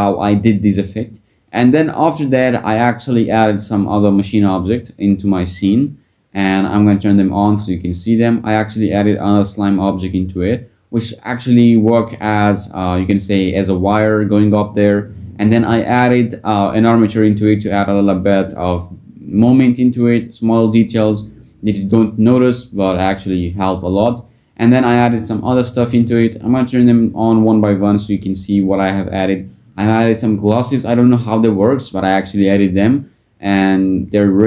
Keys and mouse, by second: 8.5 click, 11.7-13.2 drag, 13.8 middle click, 16.4 click, 25.1 click, 28.0 click, 32.6 click, 33.0 click.